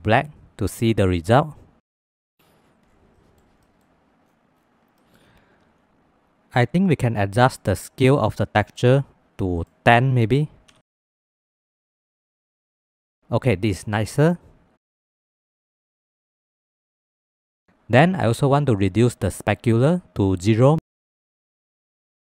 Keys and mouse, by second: 1.3 middle click, 2.0 shift+middle drag, 3.2 middle click, 3.6 middle click, 5.0 click, 8.1 click, 9.6-11.3 drag, 12.9 ctrl+s, 15.2 click, 15.7 middle click, 16.2 middle click, 17.0 middle click, 17.5 middle drag, 18.2-19.7 drag, 21.0 ctrl+s, 21.9 middle click.